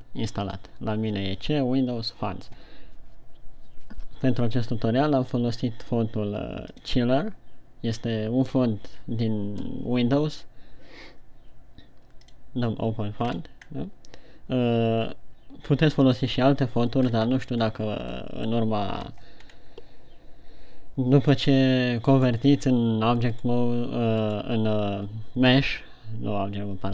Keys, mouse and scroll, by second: 12.8 click, 13.6-14.4 scroll up 4.